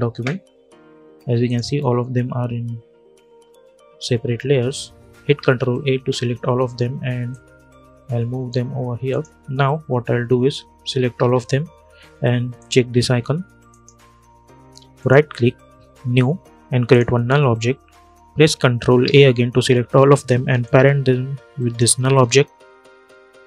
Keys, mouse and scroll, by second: 1.2 click, 5.1 ctrl+a, 7.0-8.8 drag, 10.8 ctrl+a, 12.3 click, 14.7 right click, 16.6 click, 18.7 ctrl+a, 20.3-23.4 drag.